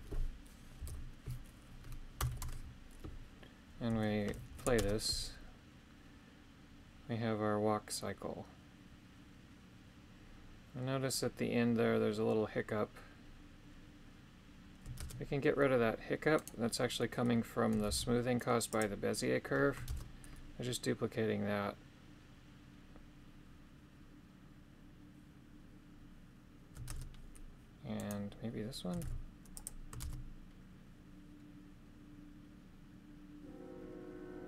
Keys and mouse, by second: 4.5 shift+Left, 4.8 shift+space, 15.0 shift+space, 16.4 right click, 17.9 shift+d, 18.7 click, 19.9 shift+space, 26.9 shift+space, 28.0 right click, 29.0 shift+d, 30.0 shift+space.